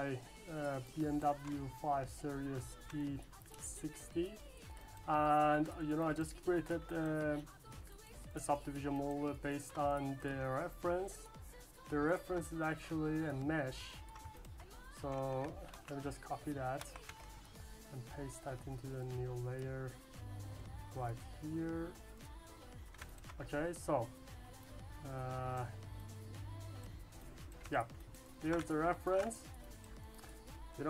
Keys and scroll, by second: 15.7 ctrl+c, 16.8 ctrl+v.